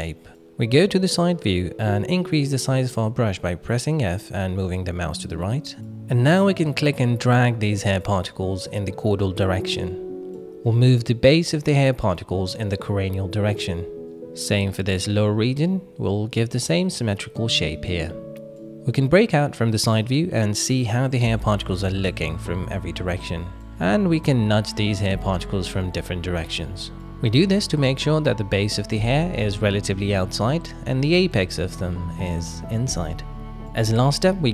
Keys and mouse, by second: 1.0 KP_3, 1.7 shift+middle click, 2.2 shift+middle click, 2.6 f, 3.4 f, 4.7 f, 6.2-8.8 drag, 8.8 f, 9.2 f, 9.3 f, 12.0 click, 14.1 click, 15.4-16.9 drag, 17.7-18.5 middle drag, 18.9-19.5 middle drag, 20.9-21.4 middle drag, 21.8 middle click, 22.4 click, 23.8-24.1 middle drag, 24.3 shift+middle drag, 24.8 drag, 25.3 alt+z, 26.1 click, 26.9 shift+middle click, 27.2 middle click, 27.8-30.0 drag, 30.0-31.9 middle drag, 32.3 click, 33.2-33.6 middle drag, 34.1-34.5 drag.